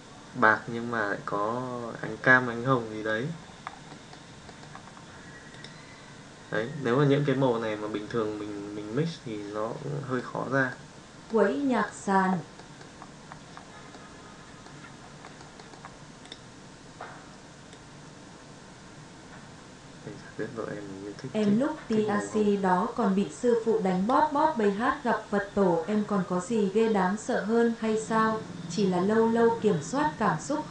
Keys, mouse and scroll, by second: 4.0 middle drag, 10.2-10.8 middle drag, 11.3-11.8 middle drag, 12.5 middle drag, 13.9-14.6 middle drag, 16.2 click.